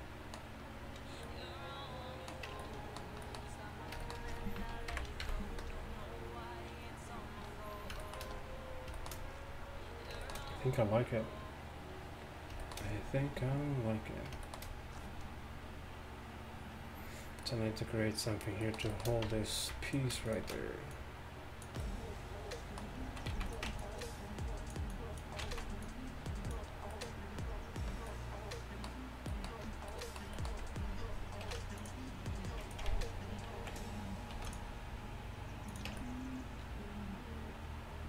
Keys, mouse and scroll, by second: 2.5 Tab, 5.0 KP_1, 5.3 a, 9.9 middle click, 10.5 middle click, 12.2 middle click, 19.3 Tab, 23.4 z, 25.5 z, 31.5 ctrl+r, 33.6 ctrl+z, 34.4 ctrl+r, 36.0 Tab.